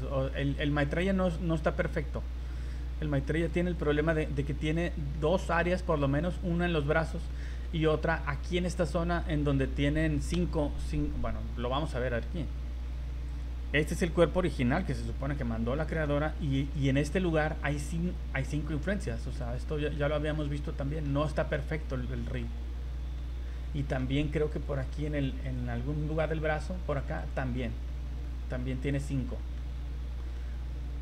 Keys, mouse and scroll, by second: 0.0 scroll down 1, 0.3 middle click, 0.9 right click, 1.3 middle click, 1.7 scroll up 1, 3.0 v, 3.4 click, 3.8 click, 4.1 middle click, 4.7 click, 5.2 middle click, 6.1 middle click, 6.3-6.7 scroll down 4, 7.3 middle click, 7.8-8.1 scroll up 3, 11.6 right click, 13.3 click, 14.9 click, 15.3 middle click, 15.9 scroll up 2, 16.4 v, 16.8 right click, 19.3 middle click, 20.0-20.3 scroll down 3, 20.3 middle click, 21.3 middle click, 22.1 shift+middle click, 23.1 middle click, 23.8 middle click, 24.5 right click, 25.1 right click, 25.4 right click, 27.2 click, 27.9 middle click, 28.9 click, 29.6 middle click, 30.4 middle click.